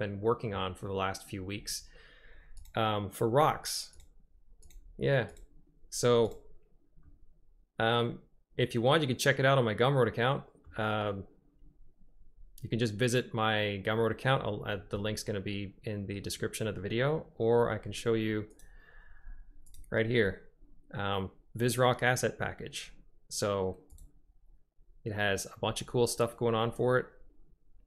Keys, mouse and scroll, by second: 4.2 right click, 4.9 right click, 5.6 right click, 6.5 right click, 7.2 click, 7.3-10.8 middle drag.